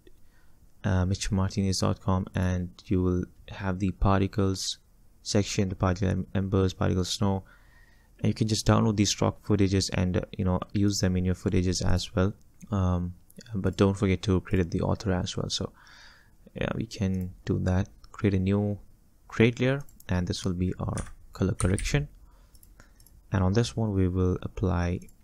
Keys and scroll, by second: 21.1 F2, 21.7 c.